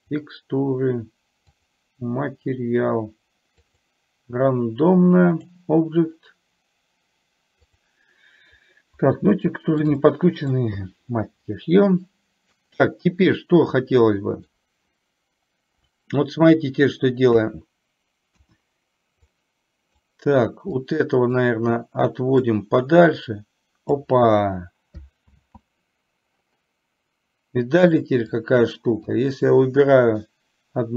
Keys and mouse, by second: 9.5 shift+middle click, 10.0-10.8 middle drag, 14.1 middle click, 19.3-20.1 drag, 20.9-21.5 drag, 22.8-24.1 drag, 25.4 ctrl+z, 28.5-29.3 drag.